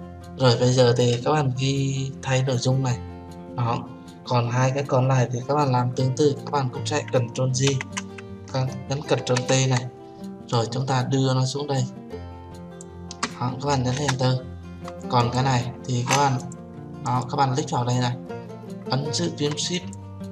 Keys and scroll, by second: 8.0 ctrl+j, 9.5 ctrl+t, 14.4 Return.